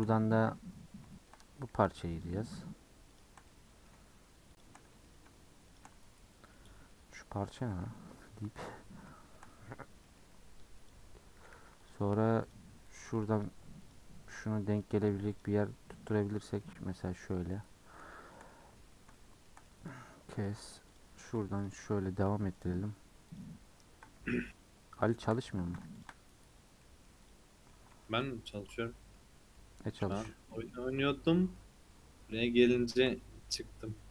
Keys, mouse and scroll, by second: 0.7-1.1 scroll up 3, 1.1-2.1 shift+middle drag, 2.1 alt+click, 3.1 alt+shift+click, 3.4-4.5 middle drag, 4.5 alt+shift+click, 4.9 middle click, 5.6 alt+shift+click, 6.4 scroll down 1, 6.5-7.6 middle drag, 7.6 scroll down 1, 7.8 3, 8.1-9.7 middle drag, 9.7-10.0 scroll up 3, 10.0 middle click, 10.7 alt+click, 11.5 2, 11.8 alt+click, 12.4 alt+click, 13.3 alt+click, 13.8 alt+click, 15.3 alt+click, 16.2-17.5 middle drag, 17.9 middle click, 18.8-19.3 scroll up 2, 19.3-20.8 shift+middle drag, 20.8 click, 21.5 ctrl+click, 22.5 ctrl+click, 23.2 ctrl+click, 24.4 shift+click, 25.1 shift+click, 25.9 shift+click, 26.6 scroll down 1, 26.8 middle click, 27.2 click, 27.7-29.3 middle drag, 29.3 scroll down 2, 29.5-31.3 middle drag, 31.3 scroll up 1, 31.5-33.3 middle drag, 33.3 scroll up 1.